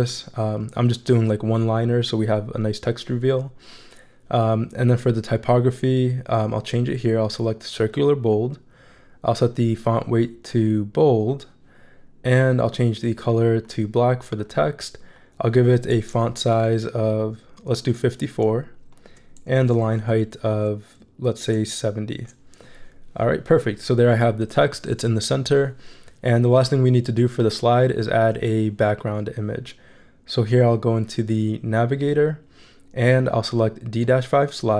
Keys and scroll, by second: 16.3 shift+Up, 19.5 shift+Up, 21.6 shift+Down.